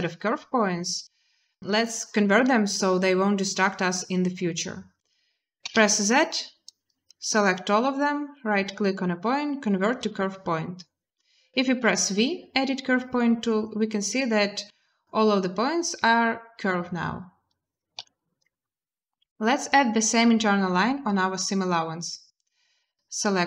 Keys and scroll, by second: 5.4 z, 11.6 v, 17.8 z.